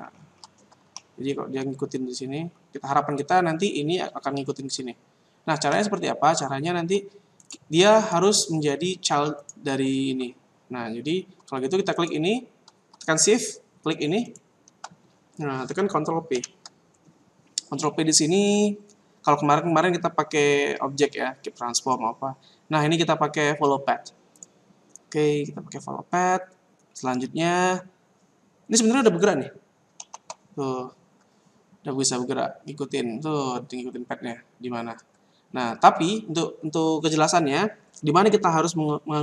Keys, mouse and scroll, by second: 0.1-0.9 scroll up 7, 0.9 middle click, 0.9 scroll up 1, 3.1 scroll down 2, 5.6 shift+middle click, 7.3 right click, 7.9 right click, 11.9 right click, 14.2 shift+right click, 16.3 ctrl+p, 30.0 alt+a, 34.9 Escape.